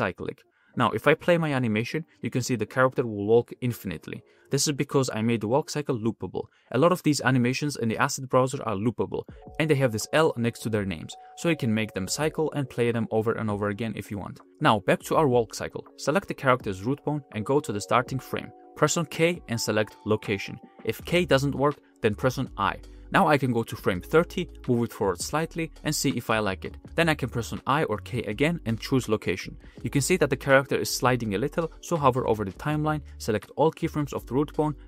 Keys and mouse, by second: 0.3 click, 1.1 space, 2.4 middle click, 2.6 click, 2.6 middle click, 7.4-7.9 middle drag, 8.3 middle click, 8.6 space, 15.0 click, 15.0 middle click, 15.0 right click, 15.6 space, 16.1-16.4 drag, 16.6 drag, 17.2 click, 17.8 shift+drag, 18.8 middle click, 19.7 k, 23.0 i, 23.8 middle click, 24.4-25.0 middle drag, 25.2 shift+middle click, 25.5 click, 25.8 g, 28.3 k, 29.2-29.7 drag, 30.5 space, 31.5-32.1 drag, 31.5 space, 32.8 a, 33.9 t.